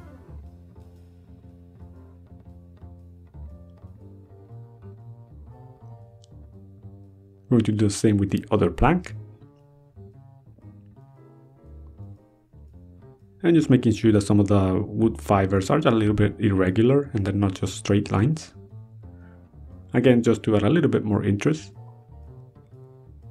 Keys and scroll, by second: 1.1 ctrl+z, 4.5 ctrl+z, 6.9 ctrl+z, 8.8 ctrl+z, 9.5 ctrl+z, 11.4 ctrl+z, 13.6 ctrl+z, 19.6 ctrl+z, 22.0 ctrl+z, 23.0 ctrl+z.